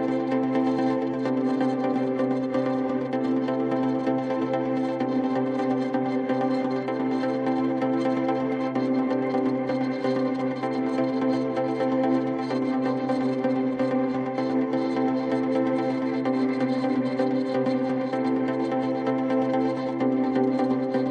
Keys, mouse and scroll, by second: 5.0 click, 5.3-6.2 typing, 7.0 Return, 11.2 click, 15.3 click, 15.9-17.1 typing.